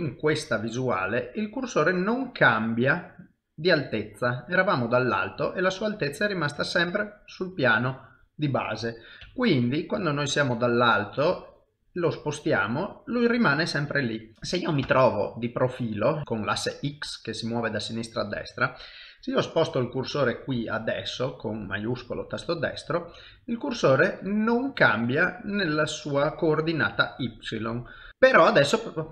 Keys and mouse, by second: 0.0 shift+right click, 2.4 middle click, 8.5 middle click, 9.2 KP_7, 10.2 shift+right click, 11.5 shift+right click, 12.4 middle click, 14.3 shift+s, 14.8 KP_1, 19.4 shift+middle click, 20.3 shift+right click, 22.6 middle click, 27.5 middle click, 28.1 shift+middle click, 28.4 middle click.